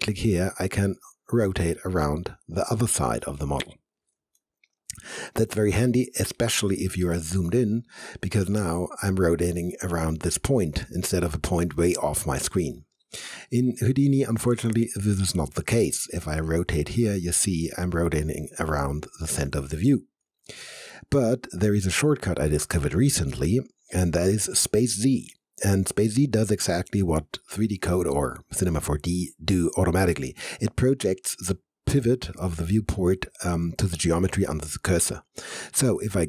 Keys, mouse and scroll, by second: 0.7 alt+click, 0.8-5.0 alt+drag, 5.0 alt+middle click, 5.9 alt+click, 6.5 alt+middle click, 7.0 alt+right click, 8.2 alt+middle click, 8.8-11.4 alt+drag, 11.4-14.0 alt+drag, 16.7-21.2 drag, 21.2-24.2 alt+middle drag.